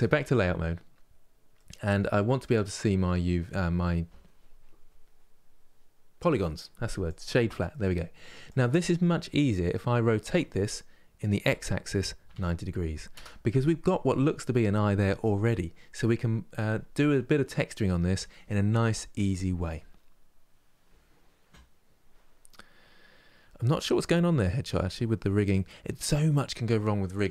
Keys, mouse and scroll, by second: 0.0 click, 0.7-1.2 scroll up 2, 1.2-6.8 middle drag, 7.7 middle click, 8.2 click, 9.9 r, 13.3-27.3 middle drag.